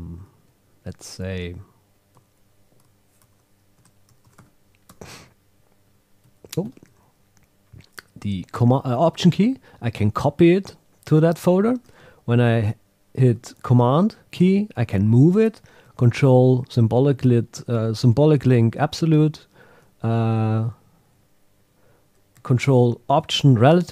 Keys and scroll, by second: 0.5 Right, 1.3 Left, 2.1 Right, 2.4 Left, 3.2 super+g, 3.8 Tab, 5.8 Right, 6.2 Left, 6.6 alt+Right.